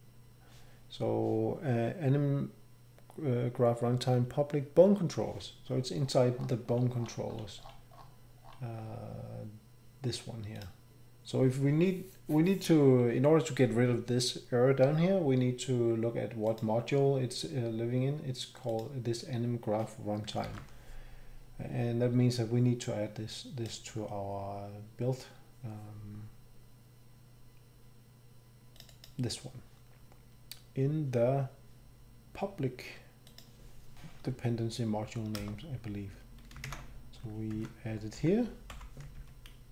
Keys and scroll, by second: 20.4 ctrl+c, 35.4 Return, 36.6 @, 37.5 ctrl+v, 38.1 End, 38.7 End.